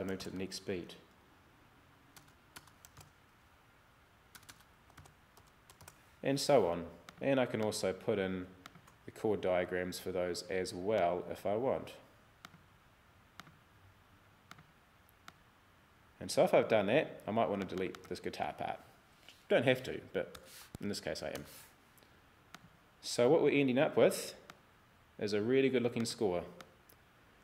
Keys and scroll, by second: 0.0-3.0 typing, 4.4-6.3 typing, 20.4 BackSpace, 21.4 Return.